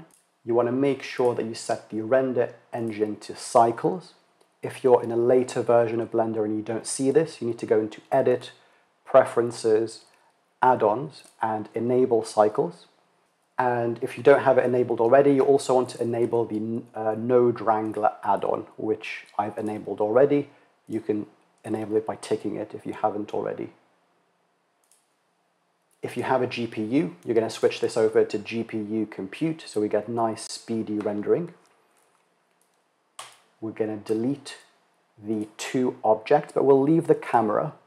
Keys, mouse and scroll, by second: 0.7-2.5 drag, 7.7-9.6 drag, 25.6-27.3 drag, 32.1-33.1 drag, 33.6 x, 36.7 click.